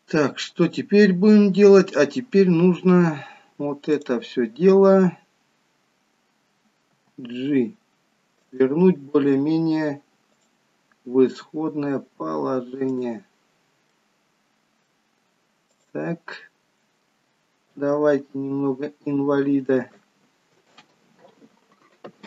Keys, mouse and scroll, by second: 0.1-1.1 scroll down 1, 1.1-3.1 scroll up 1, 4.0 click, 7.4 g, 10.6 click, 11.5 g, 14.1 middle click, 15.8 click, 18.1 r.